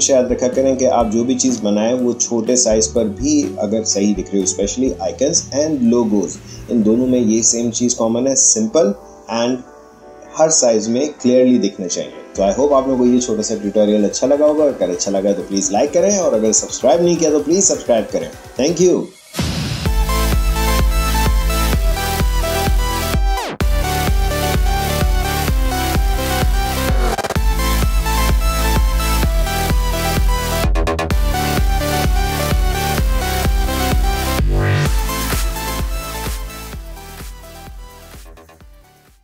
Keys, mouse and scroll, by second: 1.7 alt+scroll up 1.